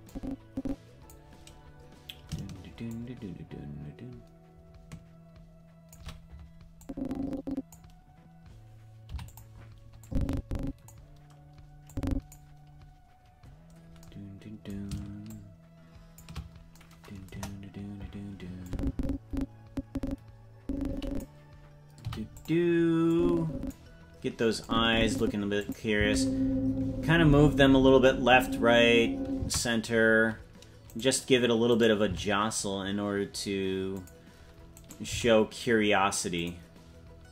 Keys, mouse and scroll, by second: 0.0-1.1 drag, 2.8-5.9 shift+drag, 6.8 click, 9.0 i, 10.0 click, 11.8 click, 15.2 shift+click, 17.2 KP_0, 18.6-21.2 drag, 22.0 i, 23.1 click, 24.6 click, 25.6 click, 25.9 space, 29.3 space, 30.8 right click, 31.7 right click, 32.0 g, 34.7 right click, 35.0 g.